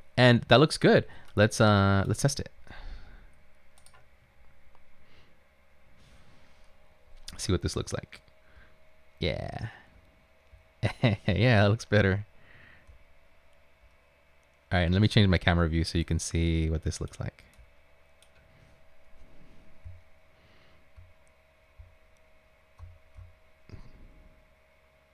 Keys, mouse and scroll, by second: 8.4 Right, 9.4 Up, 9.9 Up, 10.5 Up, 11.2 Up, 11.6 Left, 11.8 Left, 11.9 Left, 12.0 Left, 13.1 Left, 13.5 Left, 13.5 Left, 14.4 Left, 15.0 Left, 16.1-17.1 right drag, 17.1 typing, 17.6 right click, 19.9-25.1 typing.